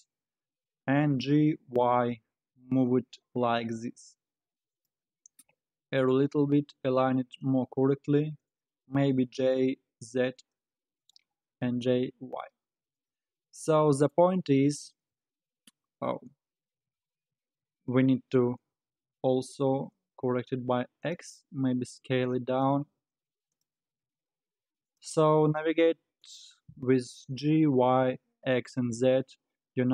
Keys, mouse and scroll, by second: 0.0-0.4 scroll up 2, 0.4 scroll down 1, 1.2 g, 5.9 r, 9.1 g, 11.5 g, 13.6-15.1 middle drag, 15.1 KP_1, 15.9 scroll up 3, 16.3-16.7 scroll down 1, 16.7 alt+z, 18.1-18.9 scroll down 2, 18.9 g, 21.5 s, 22.7 g, 23.8 g.